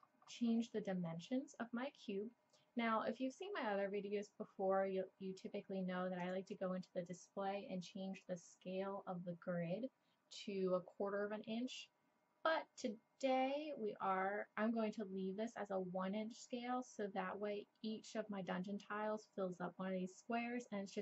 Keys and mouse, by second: 0.7 click, 6.2-7.9 drag.